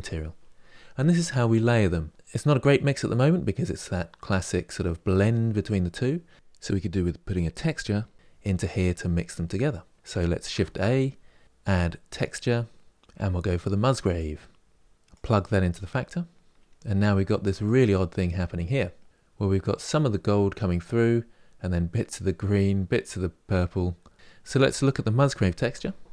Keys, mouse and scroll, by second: 7.3 click, 17.3 click, 19.0 click, 19.2-22.6 scroll up 2, 25.9 ctrl+shift+click.